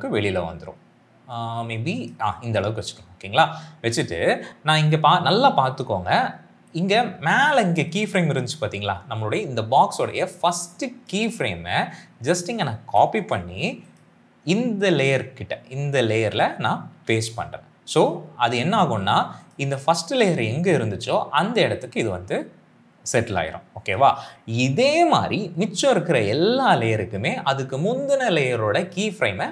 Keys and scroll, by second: 12.7 ctrl+c, 16.9 ctrl+v.